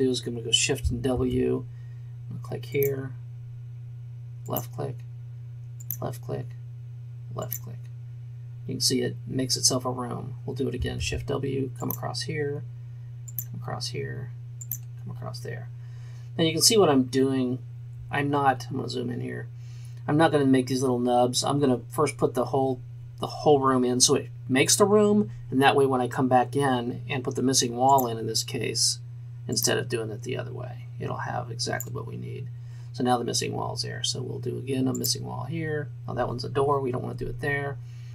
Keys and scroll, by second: 1.2 shift+w, 11.0 shift+w.